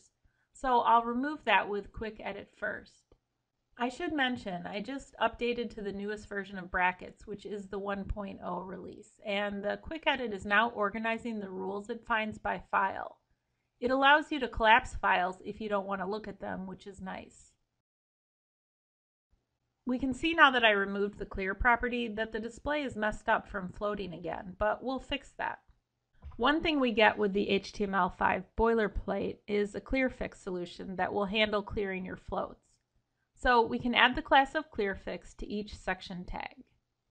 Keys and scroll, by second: 3.7 ctrl+e, 5.8 alt+Down, 17.8 ctrl+x, 26.1 Escape.